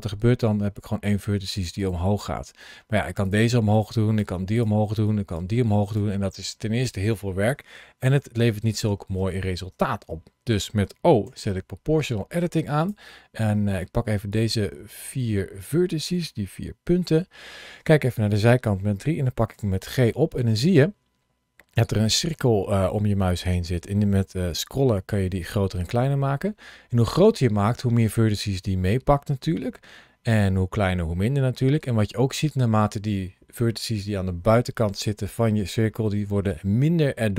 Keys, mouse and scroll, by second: 1.6 right click, 2.8 g, 3.1 click, 3.6 click, 4.1 g, 4.4 click, 4.9 click, 5.3 g, 5.7 click, 7.9 ctrl+z, 8.2 ctrl+z, 11.1 o, 12.6 click, 13.3 middle click, 14.1 click, 16.9 KP_3, 19.4 g, 21.1-21.6 scroll down 1, 21.6-22.3 scroll up 2, 23.9-25.5 scroll down 2, 25.5-26.5 scroll up 2, 26.5 scroll down 2, 30.0-31.4 scroll up 2, 31.4 scroll down 2, 35.8-36.3 scroll up 1.